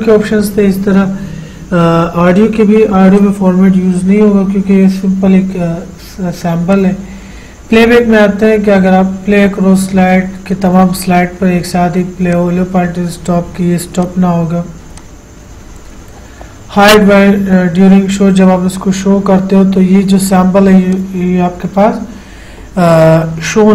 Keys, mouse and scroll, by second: 3.4 click, 6.9 click, 12.5-18.6 drag, 21.1 click, 21.2 click.